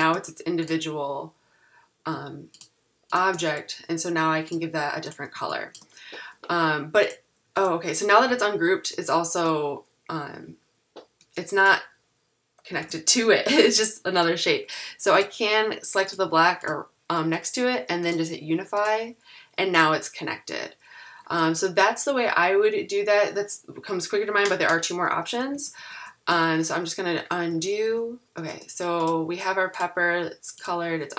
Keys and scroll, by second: 12.8 super+z, 13.6 super+=, 25.2 super+z, 26.8 super+z, 27.6 super+z.